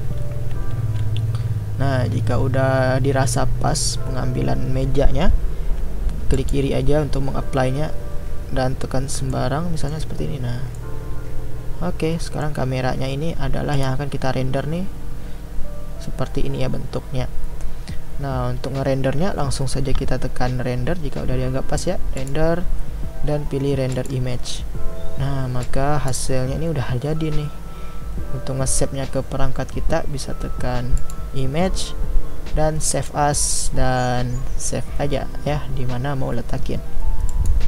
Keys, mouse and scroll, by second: 9.3-10.2 middle drag, 10.2-10.8 scroll down 1, 10.8-13.7 middle drag, 13.7 click, 24.4-25.7 drag.